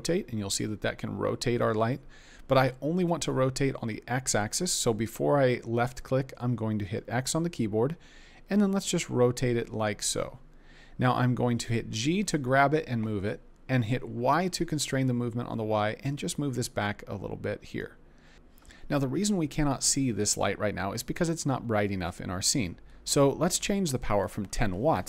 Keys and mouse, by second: 6.9 x, 11.9 g, 14.3 y, 24.3-25.0 drag.